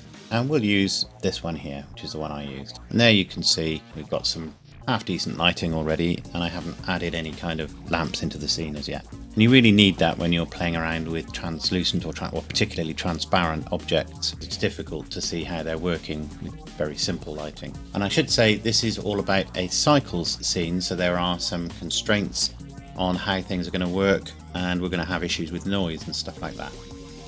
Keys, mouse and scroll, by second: 1.1 click, 9.7-10.8 scroll up 1.